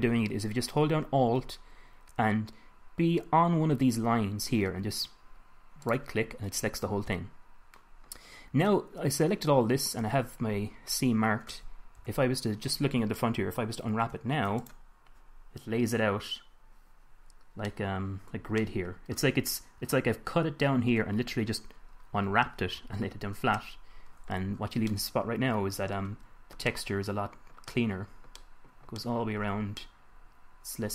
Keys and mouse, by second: 6.2-7.8 drag, 12.3 KP_1, 14.4 u, 18.0-22.7 middle drag, 24.9 Tab, 25.3-26.4 middle drag.